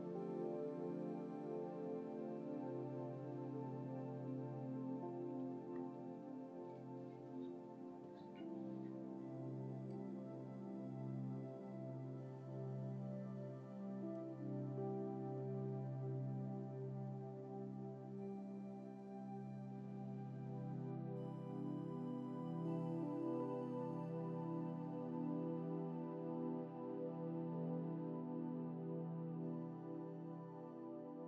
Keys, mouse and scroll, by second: 0.0 scroll down 1.